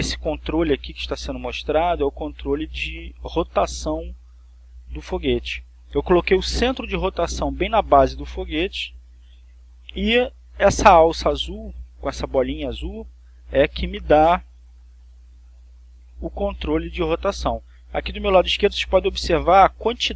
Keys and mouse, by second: 14.5-18.5 drag.